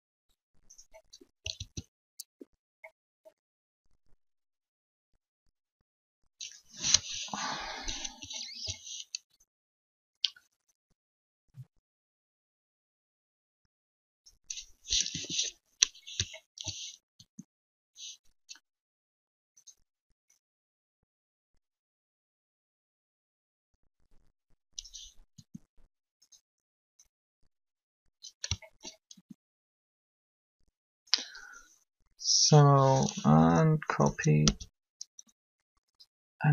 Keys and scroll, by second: 1.5 alt+a, 6.8 1, 14.9 7, 17.1 alt+shift+r, 25.3 r, 29.1 alt+shift+r, 33.8 Up, 34.3 Down.